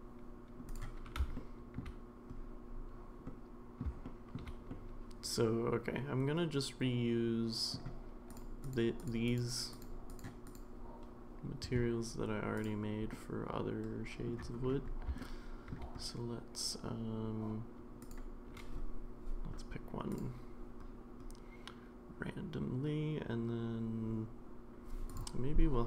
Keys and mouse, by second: 0.7 click, 1.3-1.8 middle drag, 3.3-3.8 middle drag, 4.0-4.4 shift+middle drag, 4.7-7.7 middle drag, 9.3 click, 9.7 click, 10.4 click, 12.5 click, 13.1-14.3 middle drag, 15.2-15.7 shift+middle drag, 18.2-20.2 drag.